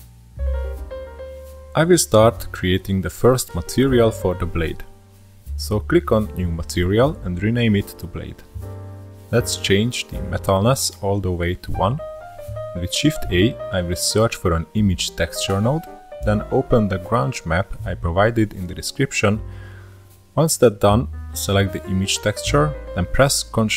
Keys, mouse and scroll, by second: 1.4 middle click, 2.0-3.3 drag, 3.3-3.9 middle drag, 3.9-7.5 drag, 7.5-7.9 scroll up 1, 7.9-8.3 middle drag, 8.3-9.1 scroll up 11, 9.1-9.7 middle drag, 9.7-10.8 scroll up 4, 10.0-10.4 middle drag, 11.4-13.9 drag, 13.9 shift+a, 17.6-18.6 scroll up 2, 20.7 click.